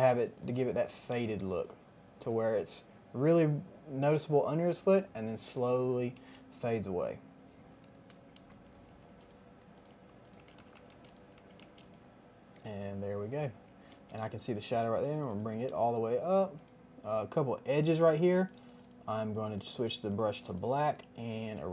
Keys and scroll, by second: 1.4 space, 5.2 space, 7.9-9.0 typing, 10.3-11.5 typing, 12.7-14.3 typing, 18.0 ].